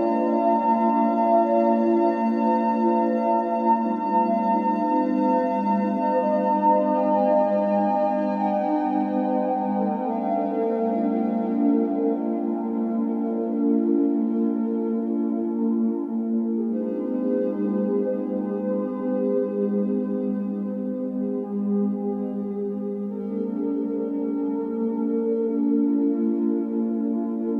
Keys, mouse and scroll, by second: 0.0-1.5 typing, 0.2 click, 2.6-3.7 scroll down 5, 3.7 a, 4.2 s, 4.6 g, 4.9 s, 5.5 Tab, 5.7 scroll down 4, 5.8-6.6 middle drag, 6.6 g, 8.3-9.9 shift+middle drag, 9.9 click, 11.4 scroll down 1, 11.7 b, 12.0 o, 13.6 ctrl+s, 17.4-17.9 scroll up 5, 17.9 click, 18.8 Tab, 19.1 a, 20.6 shift+x, 23.4 alt+n, 24.5 scroll down 6, 24.7 Tab, 24.9 b, 25.3 o.